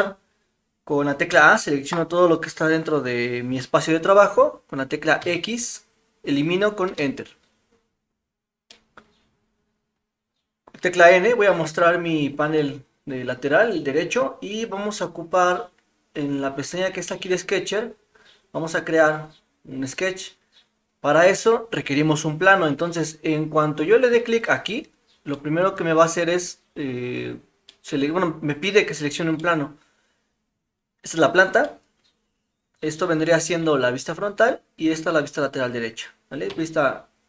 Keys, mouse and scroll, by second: 1.3 a, 5.2 x, 8.7-10.0 middle drag, 11.1 n, 17.3 click, 25.3-27.3 middle drag, 27.8 middle click, 29.4 middle click, 31.6-32.9 middle drag.